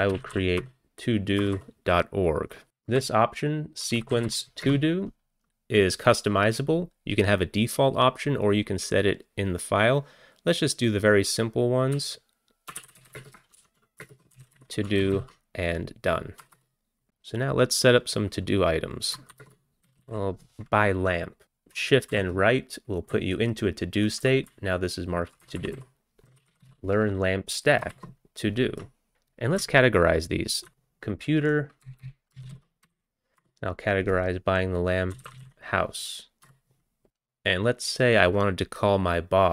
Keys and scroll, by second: 0.0-0.9 typing, 1.4 Return, 1.5 Return, 2.4-6.4 typing, 12.0-15.1 typing, 15.2 ctrl+c, 16.4 Return, 16.6 Return, 19.3-20.6 typing, 22.1 shift+Right, 23.1 Left, 23.6 Left, 23.7-24.0 Left, 24.3 Left, 24.5 Right, 25.0 Right, 25.1-25.6 Right, 26.0-29.1 typing, 30.5-33.4 typing, 35.3 ctrl+c, 36.5 p, 37.1 Down, 37.1 Return, 37.1 Left.